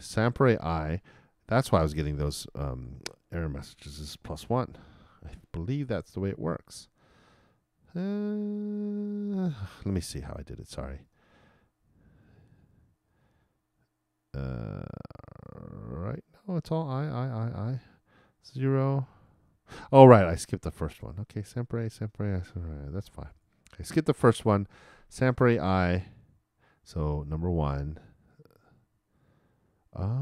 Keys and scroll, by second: 4.0 shift+=, 5.0 shift+|.